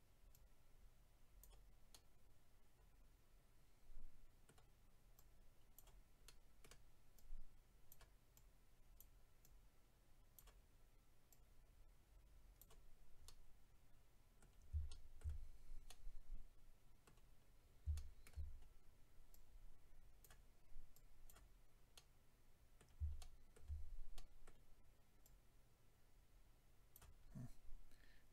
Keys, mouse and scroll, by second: 0.3 click, 1.9 middle click, 5.1 click, 6.2 middle click, 7.2 click, 9.0 click, 10.3 click, 11.3 click, 13.2 middle click, 14.9 shift+middle click, 15.4 scroll down 2, 15.8 middle click, 17.4-17.9 scroll up 2, 17.9 shift+middle click, 18.5 scroll up 1, 19.3 click, 20.9 click, 21.5-22.4 scroll down 2, 21.9 middle click, 23.1 shift+middle click, 24.1 middle click, 25.2 click, 27.1-27.6 scroll up 4.